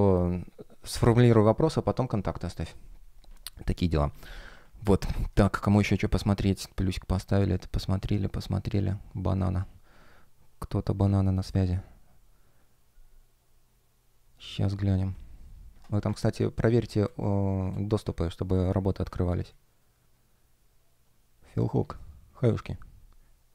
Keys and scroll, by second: 18.5 super+space.